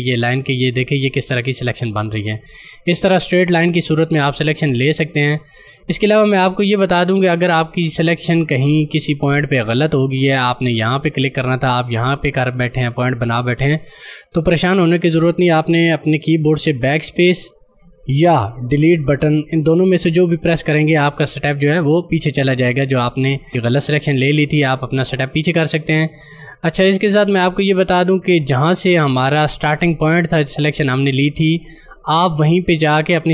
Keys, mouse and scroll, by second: 3.6 click, 17.4 BackSpace, 19.8 Delete, 26.8 click.